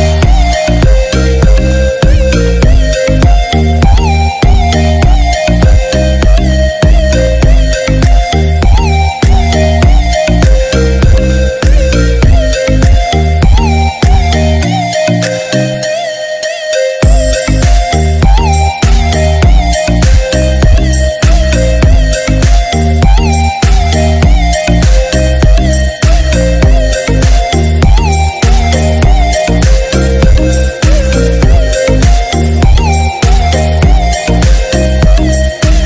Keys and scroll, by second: 19.6 ctrl+-, 21.2 ctrl+0, 22.5 ctrl+=, 28.0 ctrl+=.